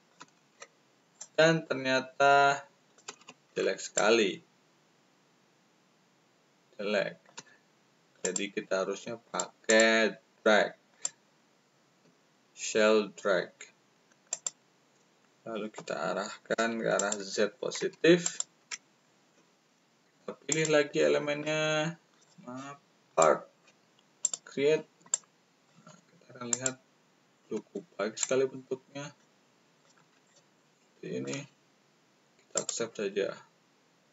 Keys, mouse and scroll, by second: 1.1-3.0 shift+drag, 3.9-7.3 shift+middle drag, 8.1 click, 9.2 click, 9.6 click, 10.9 click, 14.3 click, 16.5 1, 16.9 click, 18.2 click, 20.4 click, 22.1 click, 22.1 right click, 23.0 click, 23.0 right click, 24.2 click, 24.2 right click, 25.1 shift+click, 25.1 shift+right click, 26.4 click, 26.4 right click, 28.2-29.8 shift+drag, 28.2 shift+right click, 30.2-31.2 shift+drag, 32.5 click.